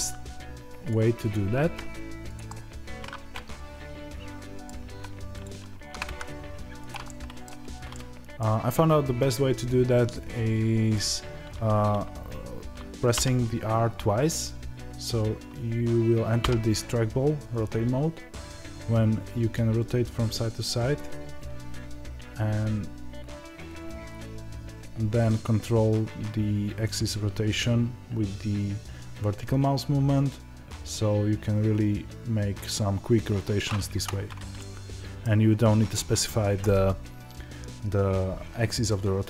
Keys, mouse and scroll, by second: 0.8 click, 1.3 g, 2.4-5.3 middle drag, 5.3 click, 5.7 ctrl+b, 6.8 click, 7.0-10.9 middle drag, 7.4 Tab, 10.9 click, 12.2-13.1 scroll down 1, 13.1 r, 34.5-39.2 middle drag, 35.2-39.2 scroll down 1.